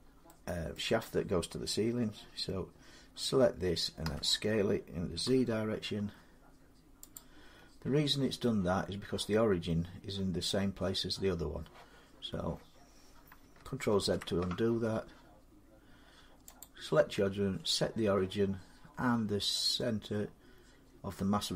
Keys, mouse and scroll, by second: 0.4 scroll, 0.5 middle click, 3.8 s, 5.1 z, 6.9 click, 7.5-10.2 middle drag, 10.2-11.8 scroll, 13.2-13.7 scroll, 13.7 ctrl+z, 16.4 click.